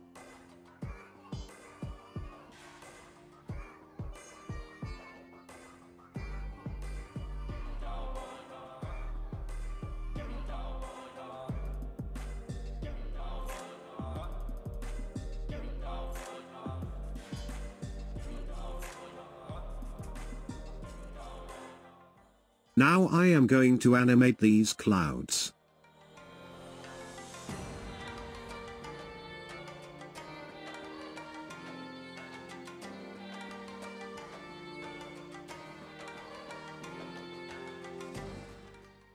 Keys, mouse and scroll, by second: 11.1-13.1 drag, 13.1-17.0 middle drag, 17.0 KP_0, 26.3-29.3 drag.